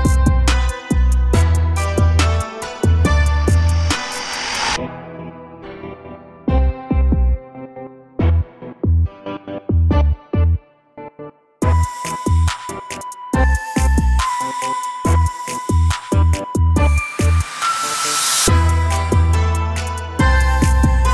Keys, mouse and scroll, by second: 0.4 a, 0.6 a, 1.2 ctrl+r, 4.9 ctrl+z, 10.7 a, 11.1 ctrl+r, 12.8 a, 13.0 a, 13.5 click, 13.7 click, 14.4 click, 15.7 click, 15.9 click, 16.9 shift+click, 17.1 shift+click, 18.1 click, 19.1-20.9 drag.